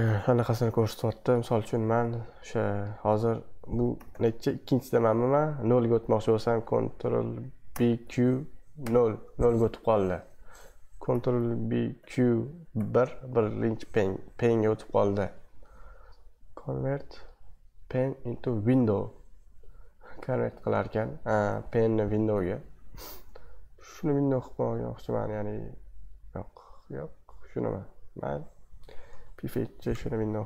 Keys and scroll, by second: 2.0 super+1, 3.9 ctrl+b, 4.1 q, 7.7 ctrl+b, 8.0-9.3 typing, 11.1 ctrl+b, 12.0-13.2 typing, 14.6 super+2, 22.4 super+1.